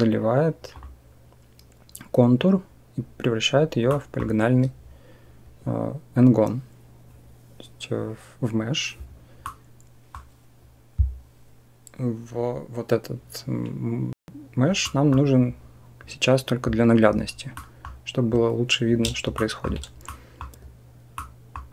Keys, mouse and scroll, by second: 0.6 click, 3.8 click, 9.3 middle click, 9.7 click, 14.7 middle click, 17.3 middle click, 17.5 click, 19.2 shift+middle click, 19.9 middle click, 21.1 middle click.